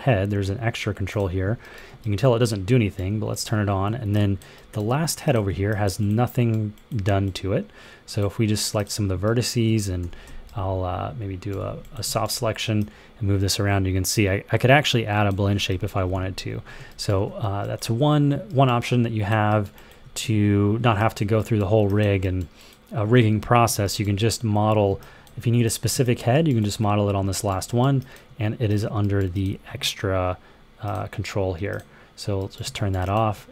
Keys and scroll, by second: 9.9-11.8 typing, 16.0 super+z, 16.4 super+z.